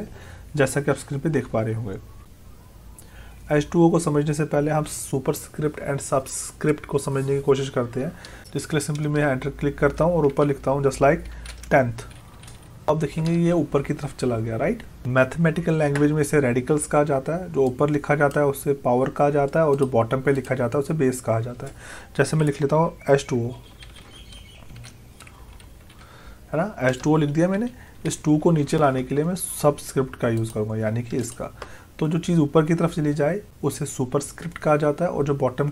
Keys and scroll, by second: 10.3 Up, 12.9 space, 27.6 Left.